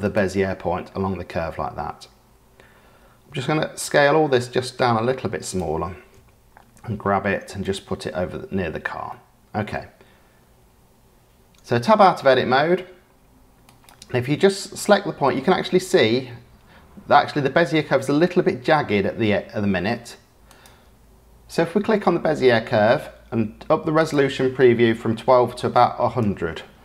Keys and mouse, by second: 3.2 a, 3.6 s, 6.1 g, 8.3 Tab, 9.0 drag, 9.3 middle click, 13.6 click, 14.9 click, 20.4 click, 23.9-26.7 drag, 25.7 KP_0.